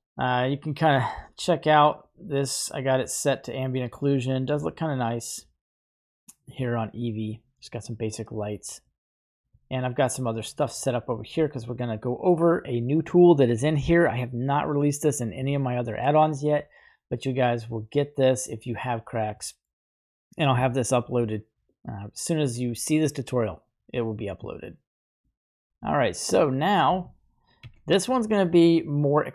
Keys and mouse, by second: 0.3 click, 1.6 middle drag, 2.1 right drag, 3.2-8.9 middle drag, 9.7-10.4 middle drag, 11.5 middle click, 19.4 middle click, 21.6 click, 25.9-26.2 shift+middle drag, 27.6 shift+a.